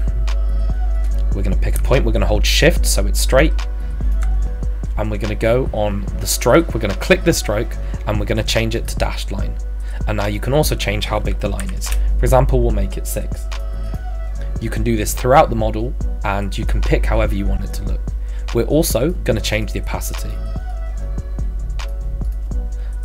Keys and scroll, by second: 11.6 shift+6, 11.9 Return.